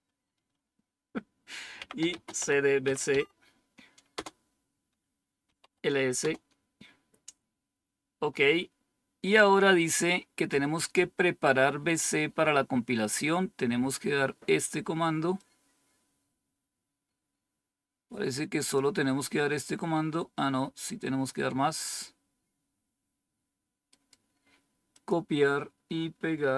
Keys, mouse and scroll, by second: 1.7-3.3 typing, 4.0 Return, 5.1-5.9 typing, 6.1 Return, 15.3-18.7 drag, 19.0-20.3 scroll down 2, 20.3-22.2 scroll up 1, 24.8 click.